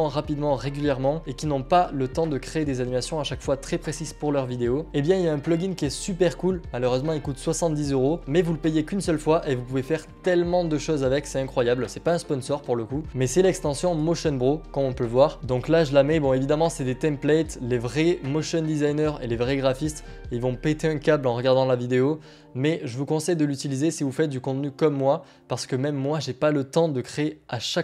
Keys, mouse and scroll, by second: 13.1 click, 14.1 click, 15.9 click, 18.6 click.